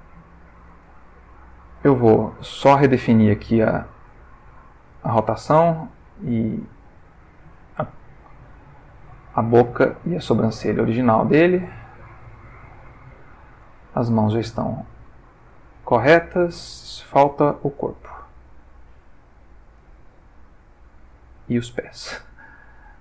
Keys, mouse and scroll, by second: 1.0-1.6 ctrl+shift+middle drag, 2.0 click, 4.3 click, 6.7 click, 7.7-9.3 drag, 9.8 click, 10.8-11.8 drag, 12.2-12.9 ctrl+middle drag, 13.0 ctrl+shift+middle click, 14.4 ctrl+middle click, 15.1 ctrl+middle click, 15.7 ctrl+middle click, 17.7 click, 19.3 click, 20.3 ctrl+middle click, 21.7 click.